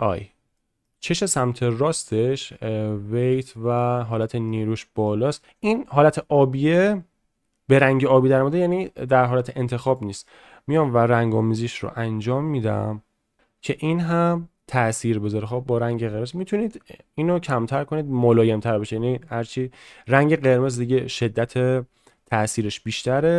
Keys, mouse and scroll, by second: 0.5 shift+middle click, 4.1 shift+middle click, 4.8 middle click, 10.0-16.5 drag, 22.5 click.